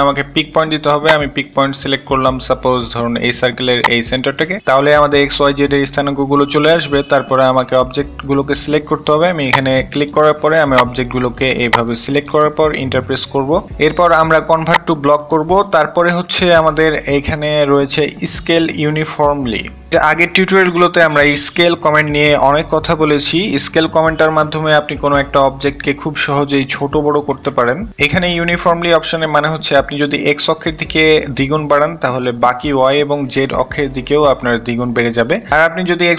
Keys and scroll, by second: 12.6-13.5 typing.